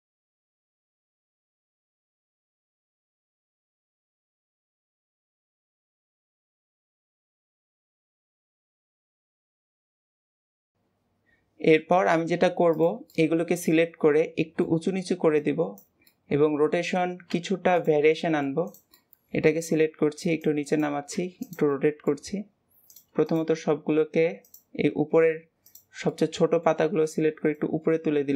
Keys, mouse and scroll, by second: 0.0 click, 0.1 shift+middle click, 0.3 alt+a, 0.3 b, 0.6 click, 1.8 shift+middle click, 2.2 Tab, 2.3 middle click, 2.5 click, 2.7 scroll up 2, 2.8 shift+middle click, 2.9 alt+a, 3.0 b, 3.2 middle click, 3.4 click, 3.7 alt+a, 3.8 middle click, 4.1 b, 4.7 middle click, 4.8 click, 5.0 middle click, 5.1 alt+a, 5.4 click, 5.7 click, 6.3 a, 6.4 middle click, 6.5 shift+middle click, 6.7 Tab, 6.8 click, 6.9 middle click, 7.0 Tab, 7.0 shift+middle click, 7.2 alt+a, 7.6 click, 7.9 click, 8.1 Tab, 8.2 middle click, 8.3 click, 8.5 middle click, 8.6 a, 9.6 click, 10.2 middle click, 10.3 alt+a, 10.4 scroll down 1, 10.4 middle click, 10.5 Tab, 10.6-12.2 middle drag, 12.2-12.7 scroll up 2, 12.7 click, 13.1-15.3 middle drag, 15.3 click, 16.0-17.2 middle drag, 17.2 r, 18.0-18.6 middle drag, 18.6 drag, 18.9-19.9 middle drag, 19.9 r, 21.6-22.8 middle drag, 22.8 click, 23.2 shift+drag, 24.4 shift+click, 25.6 shift+click, 26.1-26.9 middle drag, 26.9-27.4 scroll up 1, 27.4 click.